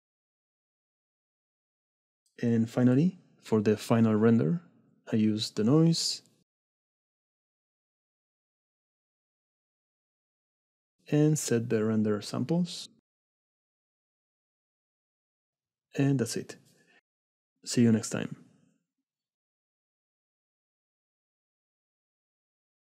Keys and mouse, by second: 0.4 right click, 0.9 middle click, 1.3 right click, 1.6 middle click, 1.7 right click, 1.9 middle click, 2.1 middle click, 6.6 right click.